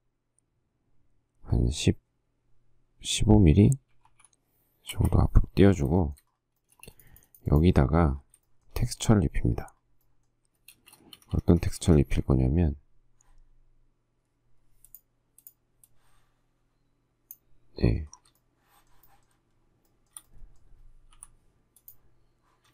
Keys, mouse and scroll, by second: 3.9-4.8 typing, 5.1 Return, 6.2 shift+middle click, 6.9 space, 8.7 shift+middle click, 11.1 Escape, 11.1 space, 11.5 Escape, 18.6 shift+middle click, 19.3 shift+middle click, 19.8 shift+scroll, 20.1 shift+middle click, 21.4 m.